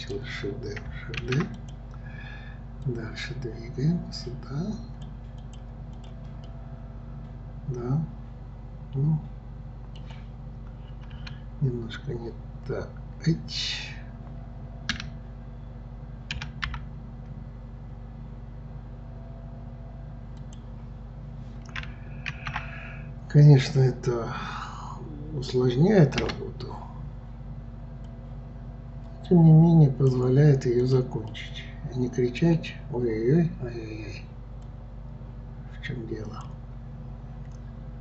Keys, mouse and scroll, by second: 1.2 shift+d, 2.8-6.0 drag, 6.5-9.5 middle drag, 22.3 shift+d, 28.0-30.9 drag, 31.3-34.3 middle drag, 34.6-37.7 drag.